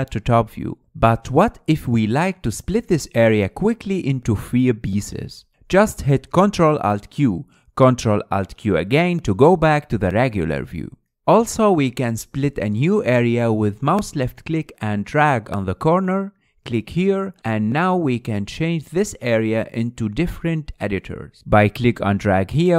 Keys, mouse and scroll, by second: 0.8-7.2 middle drag, 7.2 ctrl+alt+q, 9.3 ctrl+alt+q, 10.1-15.1 middle drag, 15.1-22.7 drag.